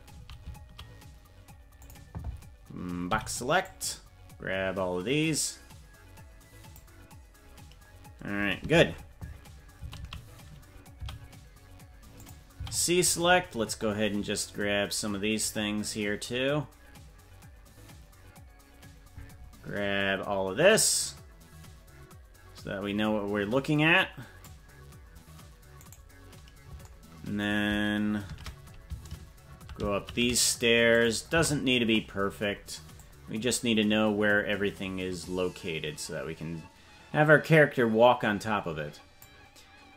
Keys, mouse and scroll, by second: 8.9 shift+`, 12.5 shift+c, 17.1 c, 28.2 shift+`, 31.3 c.